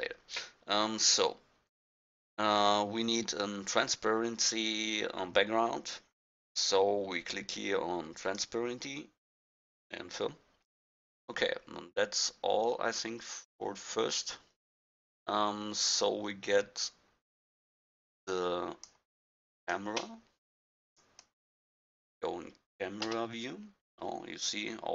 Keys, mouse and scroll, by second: 8.2-10.8 drag, 10.8-16.0 middle drag, 17.8-20.4 drag, 23.0 KP_0.